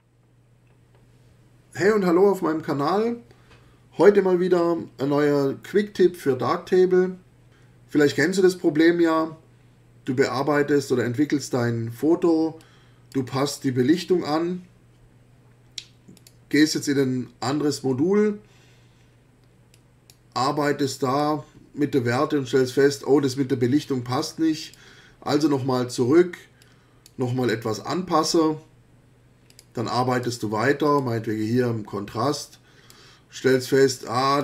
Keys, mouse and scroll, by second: 12.6-13.3 drag, 16.1 click, 19.7-20.3 drag, 20.8-21.4 drag, 24.6 click, 26.6 click, 29.5 click, 30.1 click, 30.9 click, 32.5-33.1 drag, 34.0 click.